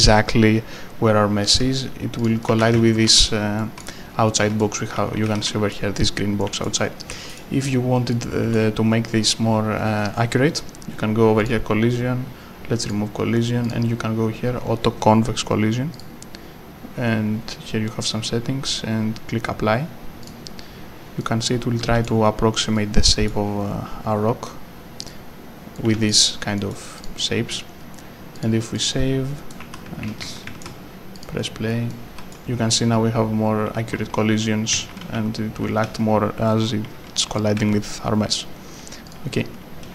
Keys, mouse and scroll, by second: 1.4 Escape, 2.2 click, 2.2-5.2 typing, 2.4 right click, 3.6 right click, 4.3 right click, 4.9 right click, 6.4 a, 7.0 right click, 7.1 d, 8.1 right click, 8.4 d, 11.4 click, 20.3 click, 21.2 right click, 21.6-22.9 typing, 22.7 right click, 25.1 click, 26.1 w, 26.5 right click, 27.0 click, 28.8 double click, 29.5 right click, 29.6 d, 31.1 click, 32.0 d, 34.4 a, 34.8 a, 36.8 a, 39.0 click.